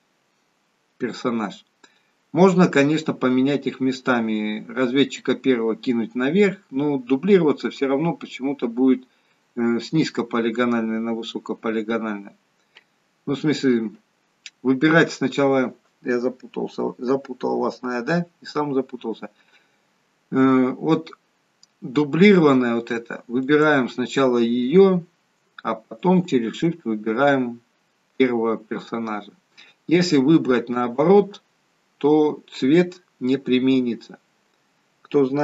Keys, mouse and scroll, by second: 23.5 click, 26.1 shift+click.